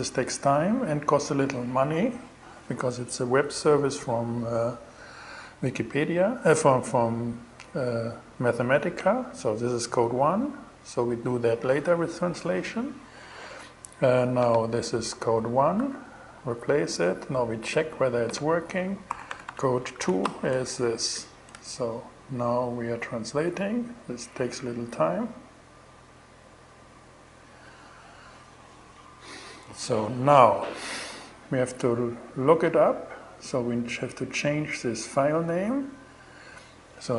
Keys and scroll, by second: 15.2 i, 18.3-20.9 typing, 21.0 shift+Return.